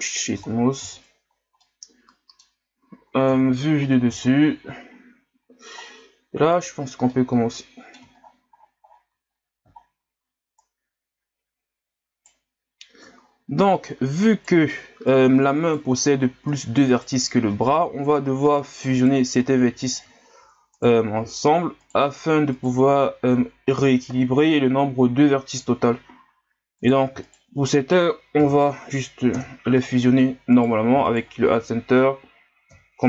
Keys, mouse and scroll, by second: 0.4 ctrl+scroll down 4, 0.8 Tab, 1.2 scroll up 3, 1.6-3.3 middle drag, 3.3 KP_7, 4.2-5.8 scroll up 9, 5.8-6.5 scroll down 1, 6.5 right click, 7.1-8.2 middle drag, 8.2-9.0 scroll down 21, 9.3 scroll up 1, 9.8 shift+scroll down 1, 10.6 right click, 13.2-13.7 ctrl+scroll up 3, 13.9 right click, 15.1 right click, 16.5 right click, 17.6 ctrl+scroll up 1, 18.5 right click, 19.4-21.9 right drag, 22.5 shift+right click, 26.8 right click, 27.2 shift+right click, 28.4 m, 30.5 right click, 31.0 shift+right click, 32.7 m.